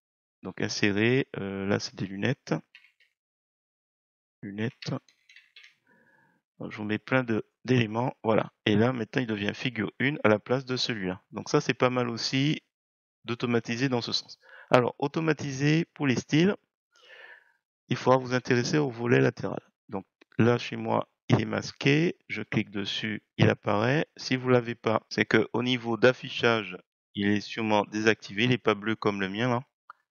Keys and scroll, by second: 2.5-6.0 typing.